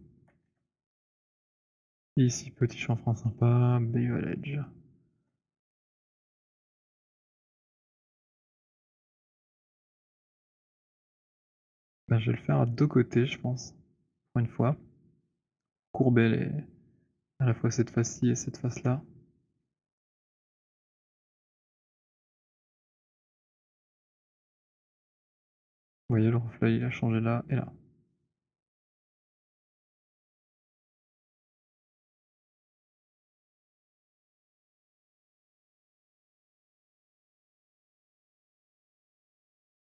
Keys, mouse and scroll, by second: 0.7 w, 1.1 click, 5.3 shift+right click, 14.5 click, 18.5 w, 19.6 click, 20.5 shift+click, 21.1 shift+click, 22.1 shift+click, 23.8 shift+click, 25.0 shift+right click, 29.0 right click, 29.2-30.0 scroll, 30.9 click, 34.3 click, 35.0 click.